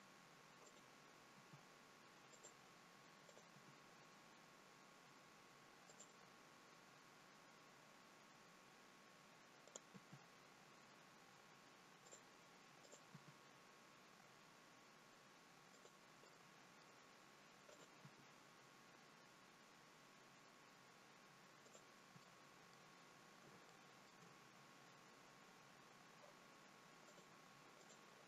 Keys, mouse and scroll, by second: 0.6 click, 1.4 g, 3.3 click, 3.5 g, 6.6 scroll up 2, 7.4 scroll down 1, 9.6 click, 9.9 g, 12.8 click, 13.1 g, 16.2 middle click, 17.6 click, 18.0 g, 22.2 middle click, 23.0 scroll down 2, 23.6 shift+middle click, 27.1 click.